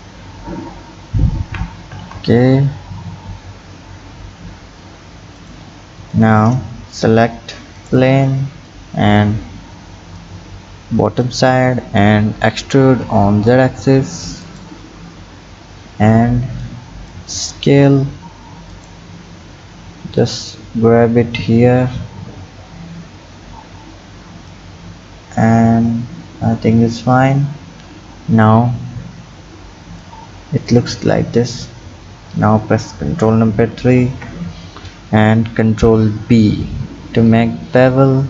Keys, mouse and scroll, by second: 6.1 click, 7.7 click, 16.7 click, 20.2-23.2 drag, 30.1 click, 32.9 KP_3, 34.0 ctrl+KP_3.